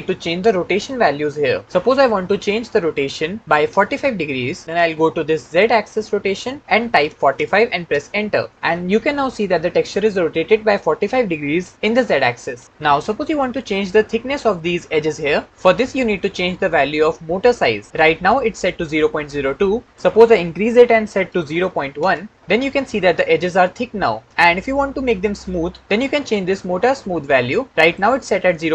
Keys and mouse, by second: 5.3-7.7 drag, 16.1 middle click, 19.8-21.8 drag, 27.8-28.7 drag.